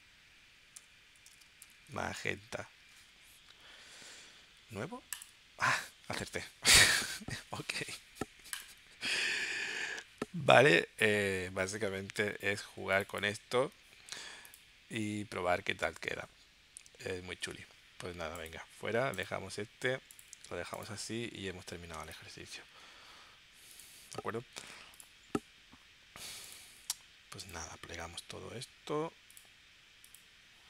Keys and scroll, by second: 0.8-2.7 typing.